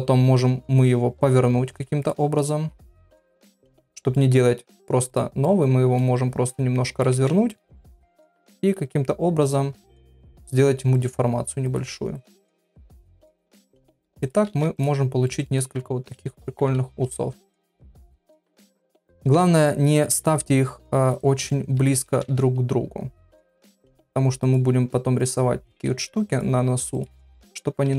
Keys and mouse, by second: 2.9-4.2 middle drag, 5.1 click, 5.4 middle click, 6.6 click, 7.2 Tab, 7.5 middle click, 8.2 click, 8.8 g, 10.2 click, 10.3 g, 11.7 click, 12.5 middle click, 12.5 g, 13.3 click, 13.5 g, 14.5 Tab, 14.8 click, 15.2 middle click, 15.6 click, 16.6 KP_3, 18.2 shift+middle click, 18.6 shift+d, 19.3 r, 20.1 g, 21.5 middle click, 22.2 Tab, 23.5 click, 24.5 click, 24.7 g, 25.7 click, 25.9 g, 27.0 click, 27.1 g.